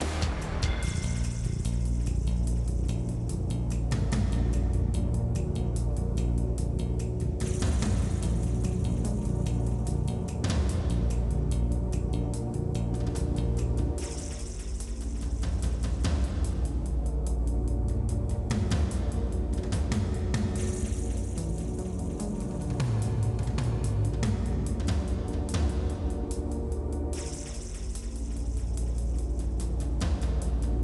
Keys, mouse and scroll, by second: 0.6-1.7 shift+drag, 2.0 shift+click, 2.7 shift+click, 3.3 middle click, 4.5 p, 5.0 click, 5.2 Tab, 5.4 click, 5.8 middle click, 6.4-8.5 drag, 8.9-10.7 drag, 10.9-11.9 drag, 12.1 click, 15.2 click, 15.4 Delete, 15.8 click, 15.9 Delete, 16.5 click, 17.4 click, 18.0-18.6 scroll up 5, 19.3 click, 20.1 Tab, 20.8 click, 21.0 Tab, 21.3 click, 21.9 f, 22.1 scroll down 1, 22.2 middle click, 22.6 click, 23.1 click, 23.6 Delete, 24.4 click, 25.2 f, 25.8 click, 26.5 f, 26.7 middle click, 27.4 click, 28.4 click, 29.2 click, 29.9 click.